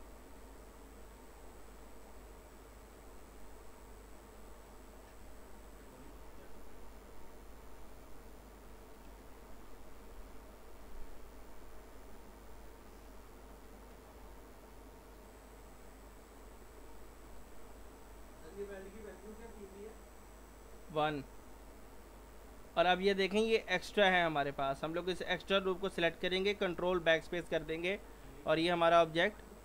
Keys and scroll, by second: 9.7 Delete, 27.0 ctrl+BackSpace.